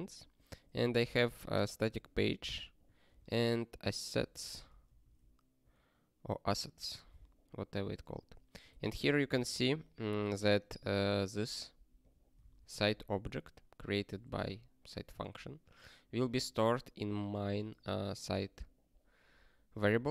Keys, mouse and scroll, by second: 0.4 click, 0.8 ctrl+space, 1.0 ctrl+a, 1.7 ctrl+g, 2.6 click, 3.0 ctrl+space, 3.1 ctrl+a, 4.3 ctrl+g, 4.7 ctrl+n, 4.8 ctrl+n, 12.0 click, 12.6 ctrl+alt+@, 14.2 ctrl+g, 16.3 click, 17.6 click, 19.9 click.